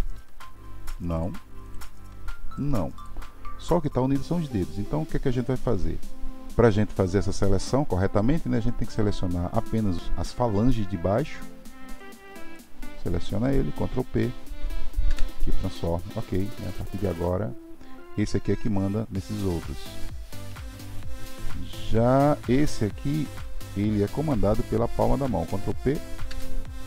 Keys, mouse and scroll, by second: 0.1 g, 1.6 click, 2.0 g, 8.8 click, 11.2-12.0 shift+drag, 12.5 shift+click, 13.9 ctrl+p, 22.4 click, 23.3-25.4 shift+drag, 25.4 ctrl+p.